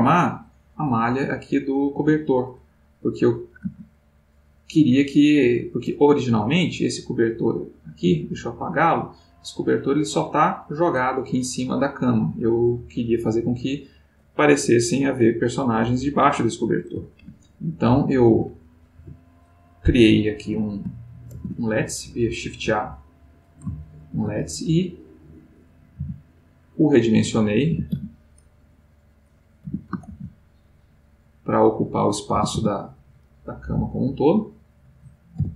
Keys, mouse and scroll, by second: 20.5 middle click, 22.9 click, 25.1 middle click, 28.0 z, 29.5 click, 30.2 shift+z.